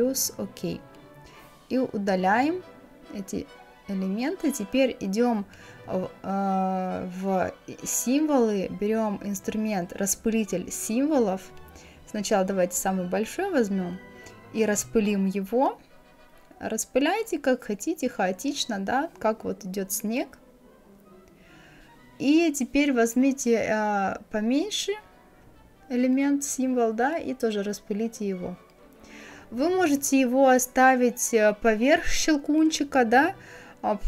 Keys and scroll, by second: 1.5 Delete, 2.7 Delete.